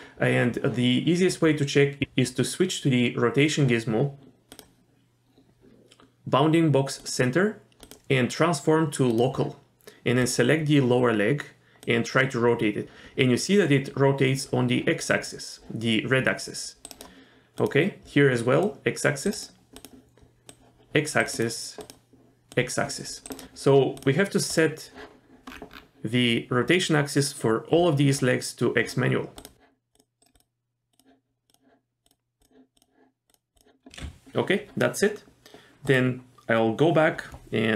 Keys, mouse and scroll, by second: 2.0 click, 4.5-7.1 drag, 7.8-9.4 drag, 10.2 click, 11.8 click, 12.0-16.9 drag, 17.6 click, 18.6-19.3 drag, 19.8 click, 20.5-21.2 drag, 21.8 click, 22.5-23.3 drag, 24.0 click, 24.5 click, 25.5-26.1 scroll down 3, 29.4 click, 29.9 click, 30.3-31.0 drag, 31.5 click, 32.1-32.4 drag, 32.8 click, 33.3-33.6 drag, 35.9 click.